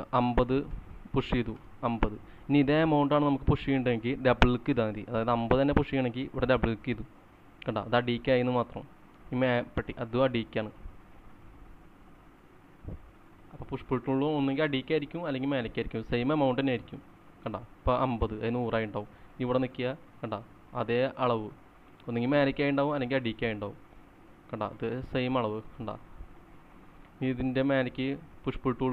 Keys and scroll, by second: 0.3-0.7 typing, 1.5 Return, 4.7 typing, 17.3-18.1 typing, 21.3-22.1 typing, 25.5-26.2 typing.